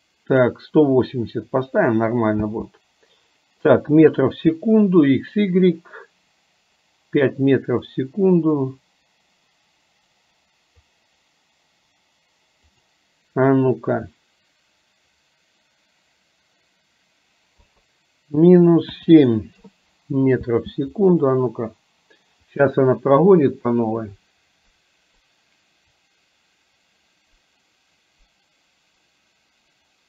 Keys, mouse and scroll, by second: 2.5 space, 8.0-10.9 drag, 12.7-19.8 drag, 20.7 space.